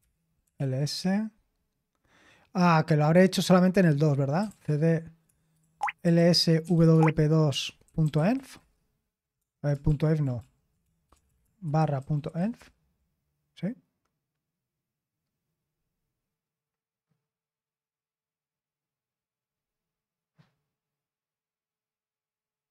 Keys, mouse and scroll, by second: 0.0-1.0 typing, 4.1-8.8 typing, 9.9-12.9 typing, 10.4 ctrl+p.